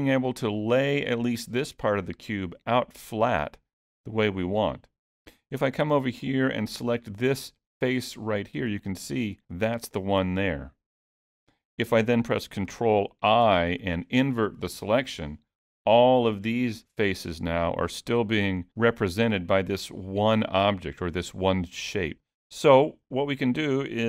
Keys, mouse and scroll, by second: 5.8 3, 7.7 click, 13.5 ctrl+i, 15.3 middle click, 23.1 middle click.